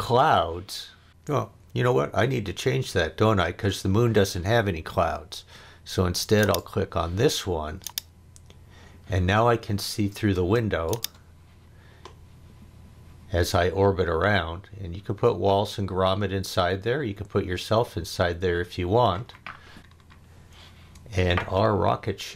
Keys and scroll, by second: 10.3 space.